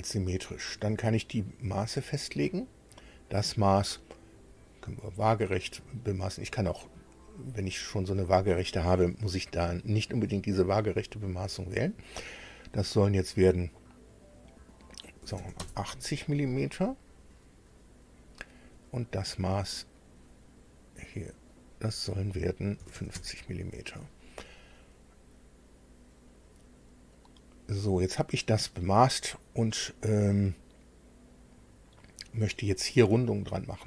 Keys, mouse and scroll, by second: 1.7 click, 4.4 click, 15.2 KP_8, 15.4 KP_0, 15.6 KP_Enter, 16.5 scroll down 2, 17.2-17.5 scroll down 2, 20.0 click, 21.5 click, 22.8 KP_5, 22.9 KP_0, 23.1 KP_Enter, 27.1 click, 29.0 click.